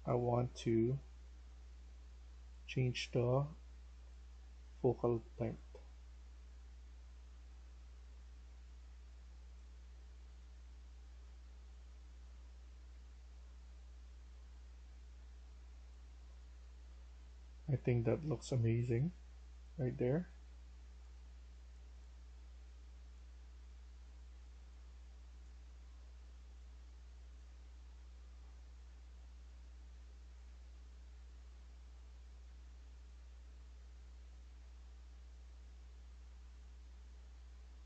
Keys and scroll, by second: 3.1 s, 8.7-11.4 typing, 16.4 e, 31.3 s.